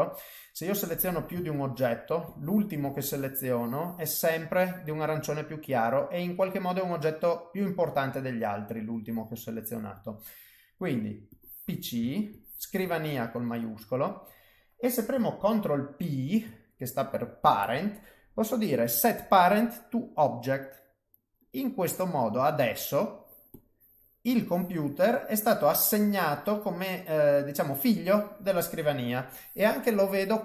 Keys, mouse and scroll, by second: 0.8 click, 1.5 shift+click, 2.2 click, 5.5 middle click, 7.5 middle click, 9.9 click, 11.3 click, 12.3 shift+click, 13.1 middle click, 16.2 ctrl+p, 22.3 middle click, 23.5 click, 24.3 click, 25.6 middle click, 27.8 click, 28.6 middle click.